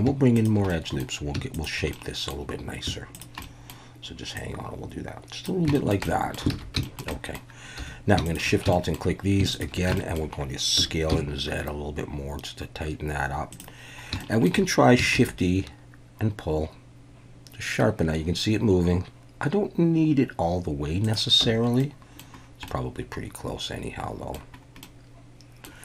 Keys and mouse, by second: 0.7 click, 1.6 shift+click, 1.9 middle click, 3.1 shift+click, 3.4 middle click, 4.4-5.5 drag, 5.7 shift+middle click, 6.1 middle click, 6.5 alt+a, 6.8 shift+middle click, 7.1 click, 7.8 2, 8.7 shift+click, 9.5 alt+shift+click, 10.0 middle click, 10.8 s, 11.1 z, 13.5 click, 14.2 shift+middle drag, 15.1 shift+e, 21.0 click, 21.4 Tab, 21.8-22.2 middle drag, 22.7-24.3 middle drag, 24.8-25.6 middle drag.